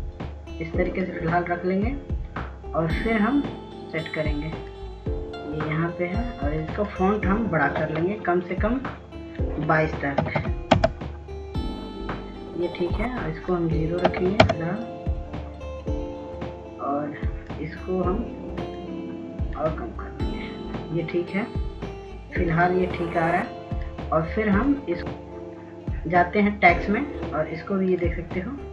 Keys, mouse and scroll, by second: 9.8 ctrl+a, 11.1 click, 11.9 KP_2, 15.0 click, 15.8 KP_0, 19.0 click.